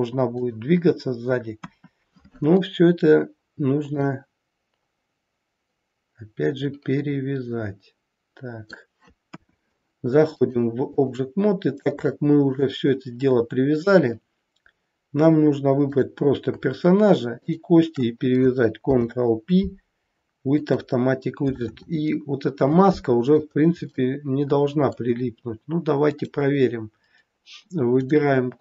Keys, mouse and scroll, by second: 1.5 KP_1, 4.0 middle click, 9.2 KP_1, 11.4-11.8 scroll down 2, 12.0 scroll down 1, 12.1 shift+middle click, 15.7 click, 17.2 shift+click, 18.9 ctrl+p, 23.5-23.8 scroll up 2, 23.9 middle click, 26.0 click, 27.9 click.